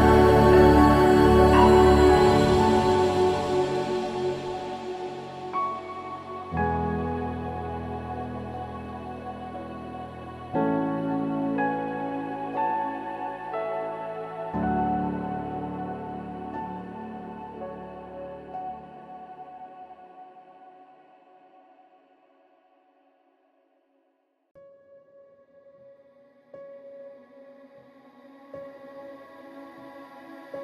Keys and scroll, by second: 5.4 ctrl+=, 7.5 ctrl+-, 23.4 ctrl+-.